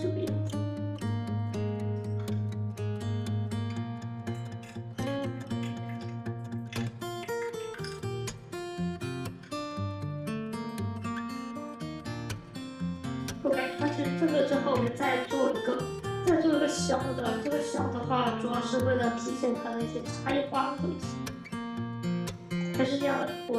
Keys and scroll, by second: 2.0 f, 3.3 1, 4.5 p, 5.8 2, 7.7 alt+f, 9.2 r, 13.6 p.